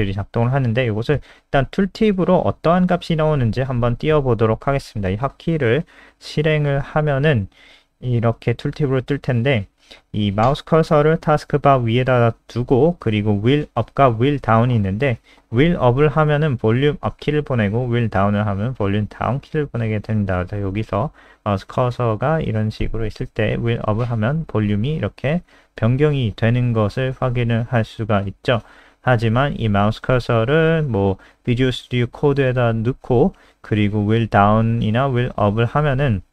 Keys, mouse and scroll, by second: 0.0-1.4 typing, 1.8 ctrl+v, 2.0 ctrl+s, 2.4 click, 21.5-22.6 scroll up 1, 22.6 scroll up 1, 23.2-23.8 scroll up 3, 23.8-25.0 scroll down 7, 25.5-26.3 scroll up 2, 27.6-28.3 scroll up 1, 30.2 click, 34.9-35.4 scroll up 3, 35.4-36.0 scroll down 2, 36.1-36.3 scroll up 4.